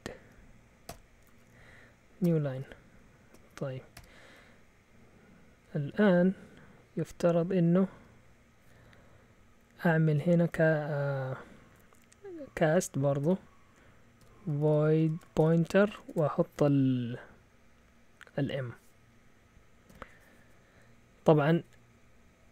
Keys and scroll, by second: 0.0-0.9 typing, 2.2-2.5 typing, 3.3 Right, 3.9 ;, 5.3-7.1 typing, 9.1 typing, 14.0-16.5 typing, 19.8 typing.